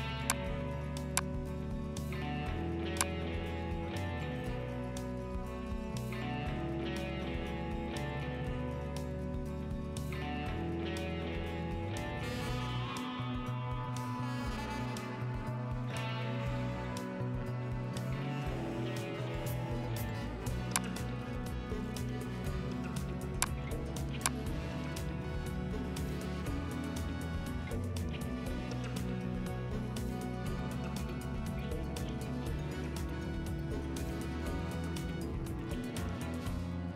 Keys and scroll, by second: 7.0 ctrl+t, 9.1 Down, 9.3 Down, 9.5 Down, 9.7 Down, 9.9 Down, 10.0 Down, 10.4 Down, 11.2 Down, 14.1 Up, 15.2 Return.